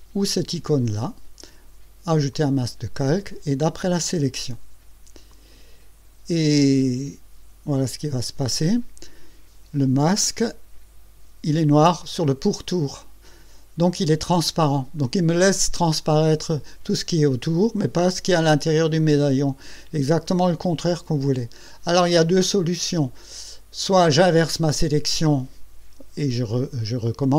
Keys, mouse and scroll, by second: 0.0 click, 2.3 click, 5.3 click, 8.4 click.